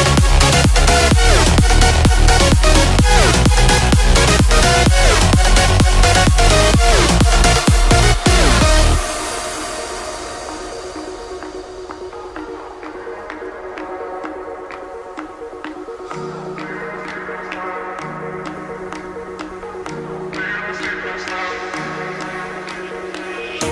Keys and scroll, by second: 14.4 ].